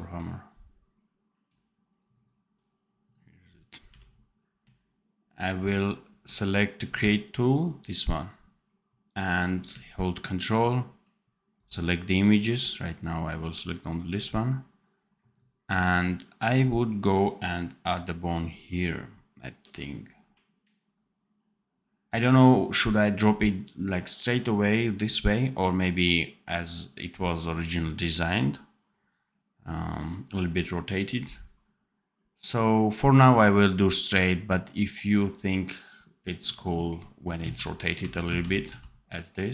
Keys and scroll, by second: 3.8 n, 37.3 c, 38.2 ctrl+z, 38.6 c.